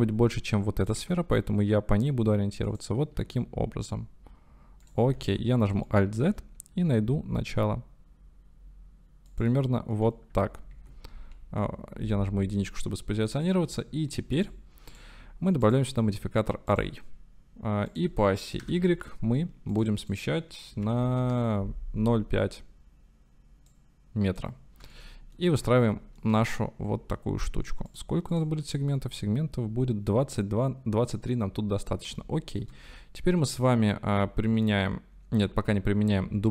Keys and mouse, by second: 0.9 click, 1.0 s, 2.7 click, 3.2 g, 4.9 click, 5.2 alt+z, 6.0 shift+middle click, 6.8 g, 9.3 click, 10.2 click, 10.8 alt+z, 11.5 KP_Decimal, 12.7 click, 13.6 shift+click, 14.4 click, 15.6-16.8 drag, 17.9-19.8 drag, 20.2-22.1 drag, 23.8 middle click, 25.0-25.4 shift+middle drag, 25.9-26.3 shift+middle drag, 28.4 middle click, 28.9-31.4 middle drag, 32.2 shift+middle click.